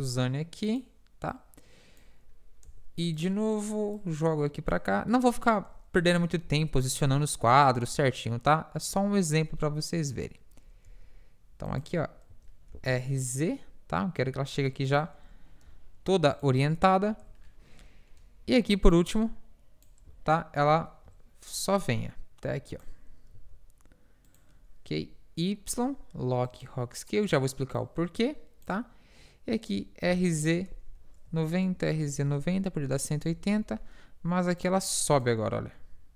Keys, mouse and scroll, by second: 1.6-3.1 drag, 3.1 i, 4.4-5.7 drag, 5.1 middle click, 6.0 KP_7, 8.9-10.8 drag, 10.9 g, 12.3 r, 15.9 i, 18.2 middle click, 19.0-24.3 drag, 23.4 g, 25.0 i, 27.8-29.6 drag, 29.8 r, 31.8 r, 33.6 KP_1, 34.7-36.1 drag, 35.8 i.